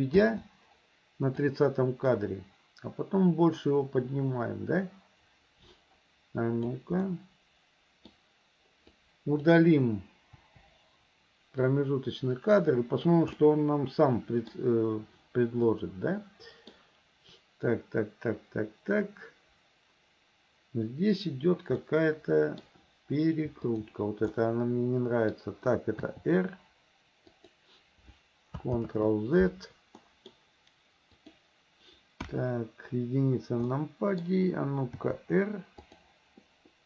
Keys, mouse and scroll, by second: 1.4-6.8 drag, 7.1-8.2 middle drag, 8.9-9.5 drag, 10.4 Delete, 11.7-13.2 drag, 13.4-14.5 middle drag, 15.7-16.8 middle drag, 21.8-22.6 middle drag, 23.6 shift+click, 24.3-25.4 middle drag, 26.1 r, 28.8 ctrl+z, 30.0 middle click, 31.1 click, 32.3 KP_1, 33.8-34.3 middle drag, 35.0 r.